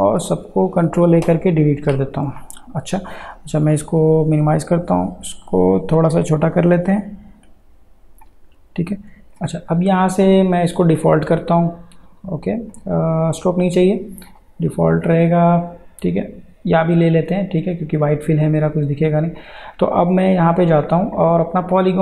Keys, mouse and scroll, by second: 0.3 ctrl+a, 3.7 click, 6.6-11.1 drag, 16.8 click, 19.4 click.